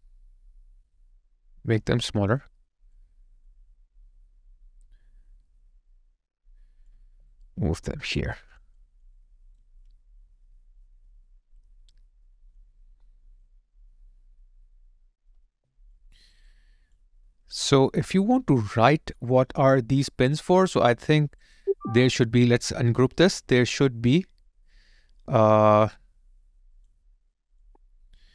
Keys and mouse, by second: 7.1 alt+right click, 7.4 alt+click, 7.9 alt+right click, 8.4 alt+middle click, 8.8 alt+click, 9.2 alt+right click, 15.5 alt+click, 16.1 alt+right click, 16.5 alt+click, 27.5 shift+click.